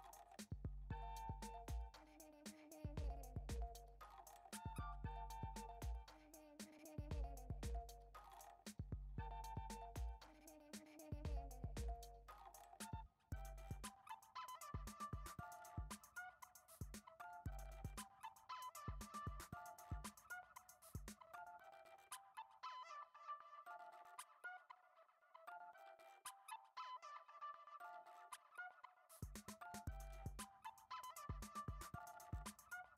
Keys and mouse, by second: 0.2 ctrl+b, 6.6 Tab, 7.2 shift+d, 8.6 drag, 8.8 Tab, 9.6 ctrl+b, 11.8 a, 12.2 s, 13.2 s, 14.4 g, 16.1 Tab, 16.5 click, 16.8 shift+middle click, 17.5 s, 18.6 s, 20.1 s, 21.1 g, 22.6-23.2 middle drag, 23.9 KP_3, 24.5 alt+z, 24.9 shift+middle drag, 25.5 r, 26.2 g, 27.7-28.1 middle drag, 28.3 g, 30.9 g, 31.4 click, 32.1 KP_3, 32.8 r.